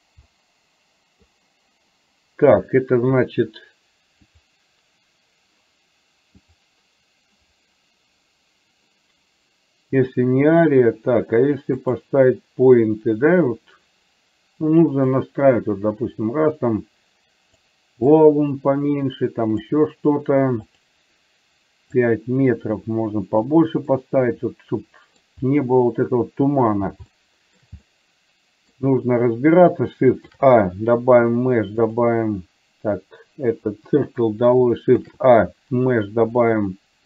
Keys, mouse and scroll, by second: 0.4 middle click, 4.4 click, 6.5-9.4 drag, 11.9 click, 15.2-17.7 drag, 18.3-19.8 drag, 20.7 click, 22.2-23.7 drag, 24.0-25.3 middle drag, 27.2 shift+middle click, 28.0 middle click, 30.3 shift+a, 33.9 Delete, 35.0 shift+a.